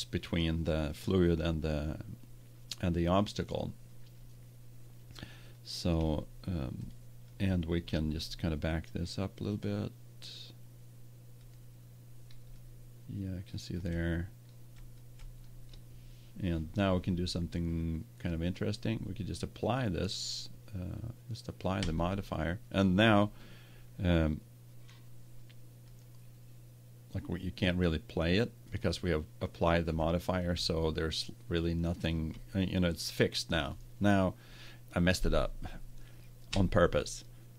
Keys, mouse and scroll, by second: 6.4-7.5 middle drag, 9.5 click, 9.7 middle click, 9.7 scroll up 1, 9.8-13.5 drag, 13.5-15.5 middle drag, 18.5-20.2 drag, 21.7-23.6 drag, 25.8-27.0 drag, 28.6-30.4 drag, 30.6-32.4 middle drag, 32.6-36.5 middle drag, 36.5 Tab.